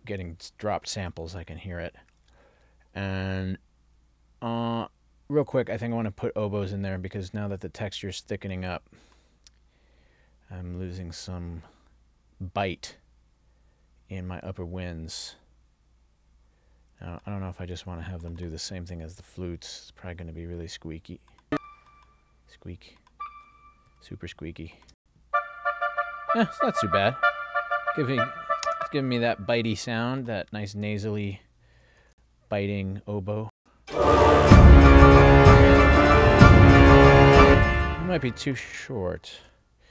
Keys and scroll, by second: 25.1 space, 28.7 space, 32.1 ctrl+alt+l, 33.6 space, 37.5 space, 39.4 ctrl+alt+l.